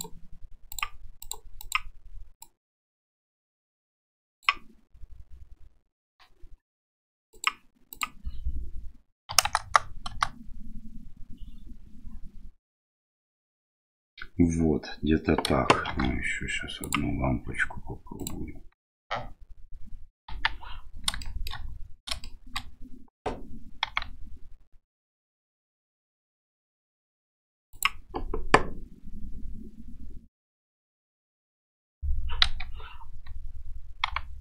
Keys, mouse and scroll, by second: 0.0-0.8 drag, 1.2 click, 1.6 click, 7.4 click, 8.0-11.7 drag, 9.6 KP_0, 15.9 shift+d, 20.4 KP_1, 21.3 shift+middle drag, 22.4 shift+middle click, 23.9 g, 32.5 KP_3, 34.1 g.